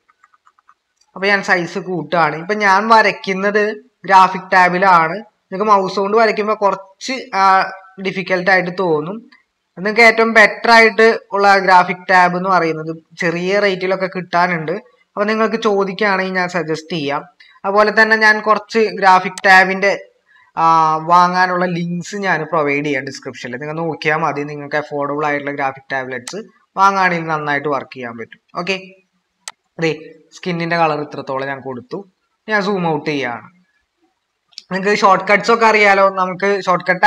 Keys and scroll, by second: 0.0-0.6 typing, 30.9 ctrl+=, 31.1 ctrl+-, 31.8 ctrl+-.